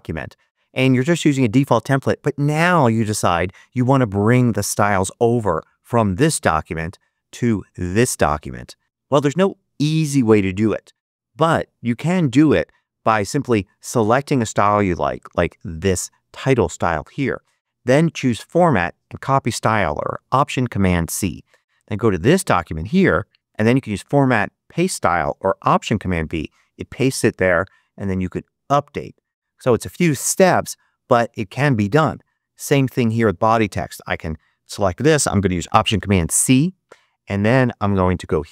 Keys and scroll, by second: 36.1 alt+super+c.